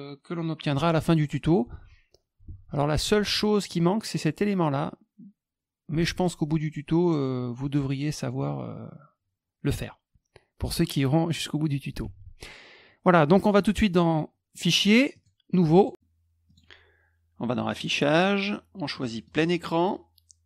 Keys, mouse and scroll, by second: 1.7 alt+Tab, 2.4 alt+Tab, 3.0 alt+Tab, 5.9 alt+Tab, 12.0 alt+Tab, 13.3 middle click, 15.1 click, 15.7 click, 16.4 click, 17.6 click, 19.2 click.